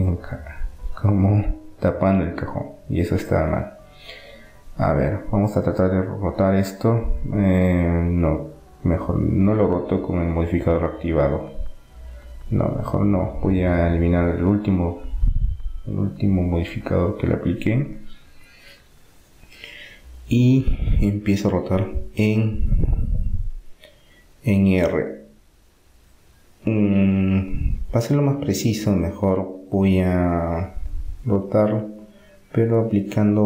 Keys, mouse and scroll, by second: 0.2-2.3 drag, 4.0-6.0 middle drag, 5.2 r, 10.0 r, 15.2-18.2 drag, 18.5 r, 23.2 r, 28.5 z, 30.5 z, 33.0-33.4 middle drag.